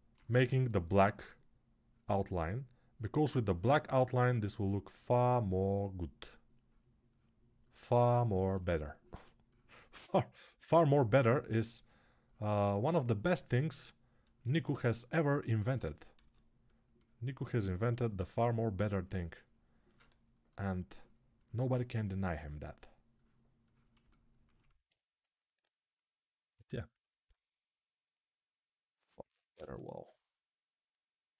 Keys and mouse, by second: 14.3 s, 15.9 s, 29.3 ctrl+z.